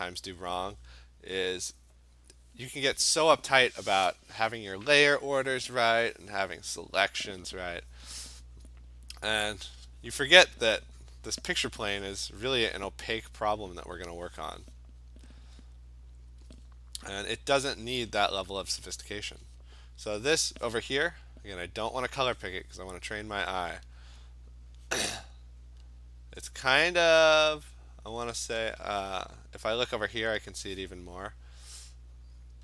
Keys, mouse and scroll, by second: 8.2 click, 8.8 click, 9.6 click, 11.6 click, 11.8 click, 12.1 click, 16.3 click, 17.2 click, 18.2 click, 18.8 click, 19.0 click, 23.9 click, 25.0 click, 25.8 click, 26.6 click, 29.9 click.